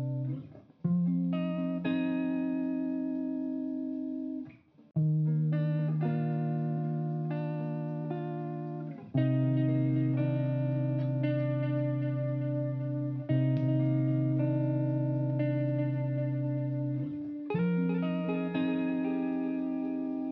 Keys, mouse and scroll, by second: 10.1 ctrl+z, 10.6 ctrl+a.